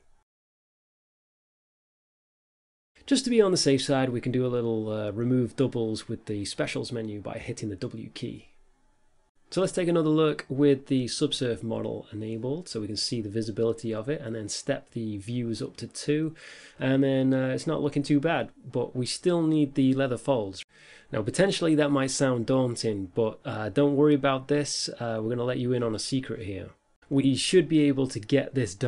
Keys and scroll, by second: 5.2 a, 5.7 w, 8.0 a, 8.7 Delete, 9.1 Tab, 10.8 5.